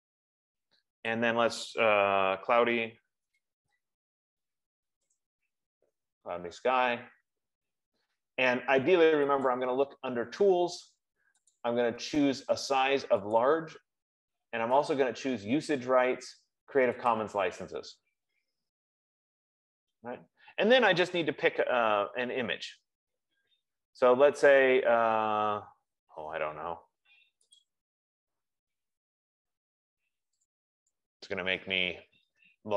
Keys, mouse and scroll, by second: 1.4-5.0 drag, 2.7-5.5 typing, 9.9 click, 11.4 click, 12.2 click, 13.8 click, 15.2 click, 17.6 click, 20.9 F15, 28.1 click, 30.8 click.